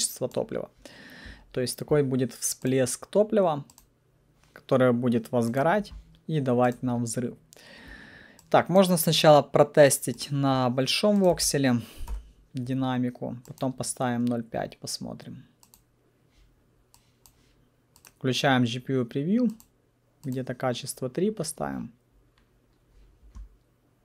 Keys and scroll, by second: 1.0 typing, 11.3 1, 12.1 Return.